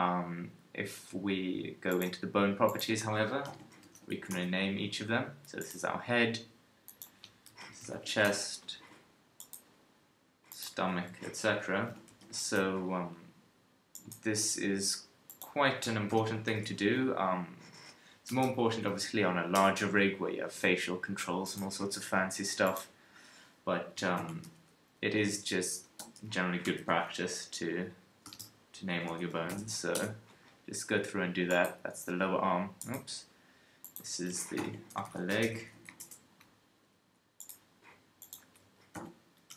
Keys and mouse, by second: 6.8 middle click, 7.5-10.5 right drag, 10.5-13.5 middle drag, 13.9-15.3 right drag, 15.3-21.4 middle drag, 21.4-22.6 right drag, 22.6-31.5 middle drag, 38.2-39.5 middle drag.